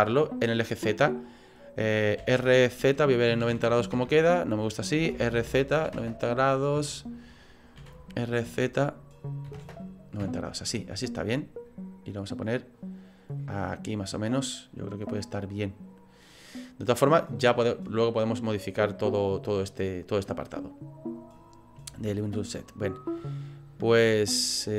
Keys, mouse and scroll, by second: 5.0 r, 11.6 click, 19.3 click, 22.5-23.6 scroll down 3, 23.6 scroll down 1.